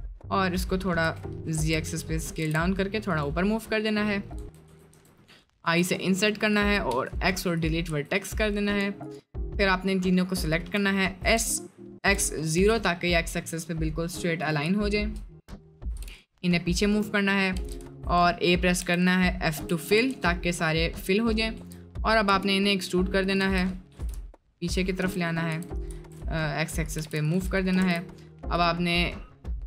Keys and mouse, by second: 1.0 s, 2.5 g, 4.4 Tab, 4.7 Tab, 4.9 Tab, 5.6 i, 6.9 x, 7.9 Tab, 11.2 s, 13.0 middle drag, 14.8 shift+middle drag, 15.9 g, 17.1 middle click, 17.6 Tab, 17.8 a, 18.2 middle click, 18.8 f, 19.5 Tab, 19.9 Tab, 20.1 Tab, 20.4-21.4 middle drag, 21.6 Tab, 22.3 e, 23.4 Tab, 23.9 g, 25.0 Tab, 25.5 Tab, 25.9 s, 27.0 g, 27.9 ctrl+s.